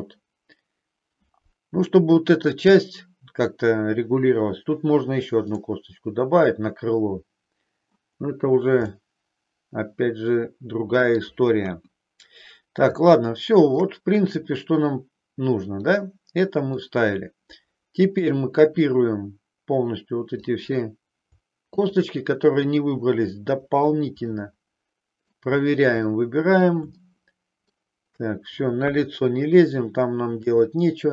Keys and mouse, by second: 5.5-7.9 middle drag, 8.9-11.1 middle drag, 11.8 KP_1, 13.0 shift+middle click, 16.7-20.4 drag, 21.7 shift+click, 24.3-25.4 middle drag, 26.1 middle click, 27.1 shift+middle click, 28.8 KP_1, 30.7 shift+middle click.